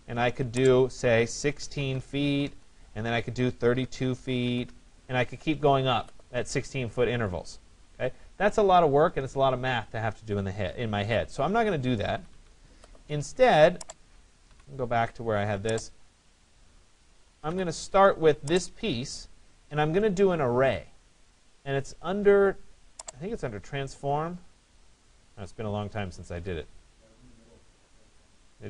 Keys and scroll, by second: 1.8 6, 2.5 Return, 4.7 Return, 10.8 ctrl+z, 12.2 Escape, 14.5 Delete.